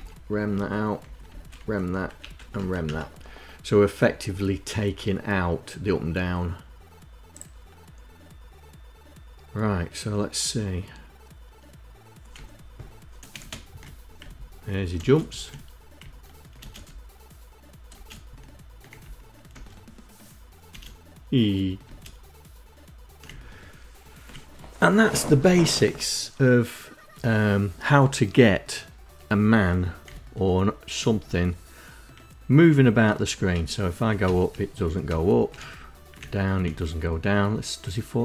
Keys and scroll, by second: 0.1 Down, 0.5 Left, 0.8 #, 1.2 Down, 1.5 Left, 1.7 #, 2.1 Up, 2.4 Up, 11.9 Down, 12.9 space, 13.8 Down, 14.5 space, 15.6 Down, 16.1 space, 17.5 space, 18.5 Left, 19.0 space, 20.2 space, 21.4 space, 22.8 Right, 29.6 Right, 30.7 Left, 33.1 Up, 33.8 Up, 34.3 Left, 34.6 Up, 35.1 Right, 36.1 Right.